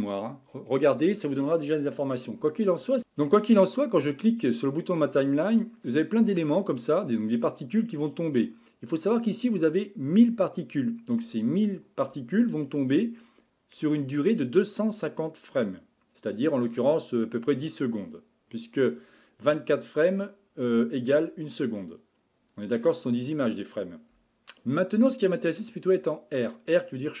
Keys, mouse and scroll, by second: 3.0-8.4 drag, 8.9-11.9 drag.